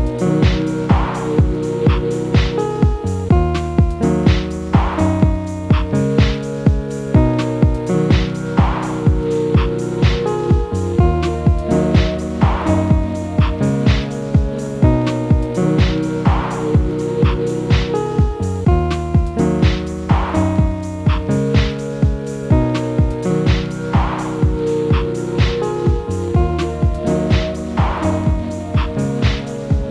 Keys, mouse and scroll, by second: 0.8-1.8 middle drag, 1.8 KP_0, 2.7 click, 4.2 click, 4.8-5.6 drag, 10.8-12.4 scroll up 3, 12.4 n, 13.3 click, 13.7 scroll down 1, 15.1-15.7 scroll up 1, 16.2 click, 18.7 click, 19.5 click, 19.7 click, 22.2 click, 22.9 KP_0, 25.0-29.9 drag.